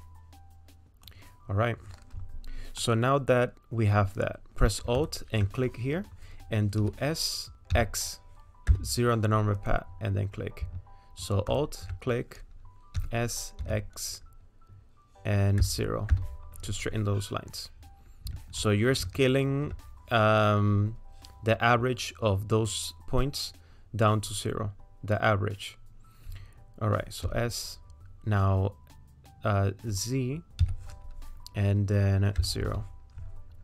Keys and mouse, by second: 2.8-4.1 middle drag, 5.0 alt+click, 6.8 s, 13.0 s, 19.3 alt+click, 27.3 s.